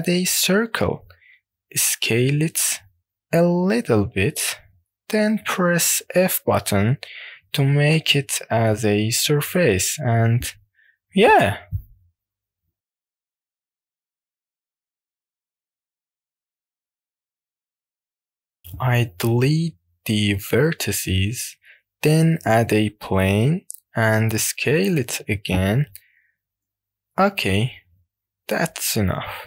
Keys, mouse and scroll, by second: 0.9 scroll up 2, 1.7 shift+middle click, 2.9 s, 4.5 click, 5.0-6.0 scroll down 2, 7.5 f, 8.8 click, 9.5 middle click, 10.8-11.3 scroll up 1, 11.3-11.7 scroll up 4, 12.7-13.3 scroll down 1, 13.3 scroll down 1, 13.4-14.7 middle drag, 14.8 middle click, 15.2 middle click, 15.4 middle click, 15.6 click, 15.8 scroll down 1, 16.0 click, 16.4 scroll down 1, 16.4 middle click, 16.6 middle click, 16.8 click, 17.2 click, 17.5 middle click, 17.9 click, 17.9 scroll down 6, 19.6 a, 20.9 x, 22.5 shift+a, 24.7-26.0 scroll up 4, 26.4 s.